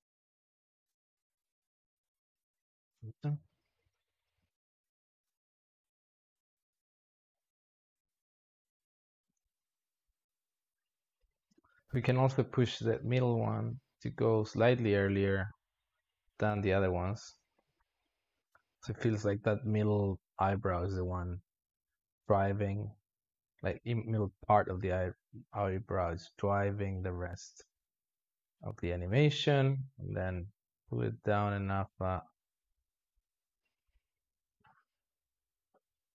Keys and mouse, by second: 0.8 space, 1.1-1.7 drag, 1.7 alt+shift+z, 2.6-3.5 drag, 3.5 alt+shift+z, 4.3 g, 5.2-6.9 drag, 8.1-9.2 drag, 9.2 space, 11.4 space, 11.8-12.7 drag, 12.7 alt+shift+z, 14.1-24.2 drag, 27.4-29.6 drag, 31.0-33.1 drag, 33.6 click, 35.0-36.1 drag.